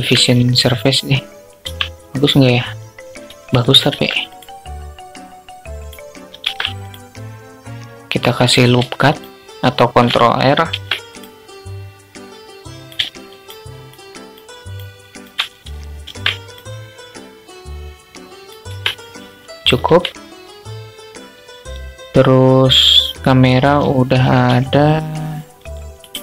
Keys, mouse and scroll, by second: 1.2 Tab, 3.2 ctrl+r, 8.5 alt+shift+click, 10.0 ctrl+r, 12.6 alt+shift+click, 13.1-14.1 alt+shift+drag, 14.3 shift+click, 15.4 ctrl+r, 18.0 Tab, 23.8 s.